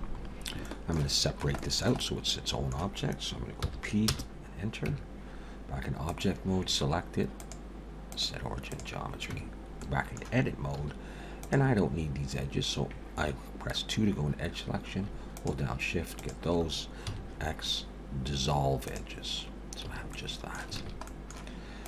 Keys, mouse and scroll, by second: 0.2-0.5 scroll up 2, 0.6 shift+middle click, 1.6 shift+middle click, 2.0 middle click, 3.6 p, 4.9 Tab, 6.1 click, 7.4 click, 9.3 Tab, 9.8 middle click, 10.8 2, 11.4 click, 15.4 shift+click, 16.5 shift+click, 17.1 x, 19.8 a, 20.1 middle click, 20.8 alt+a, 21.1 middle click.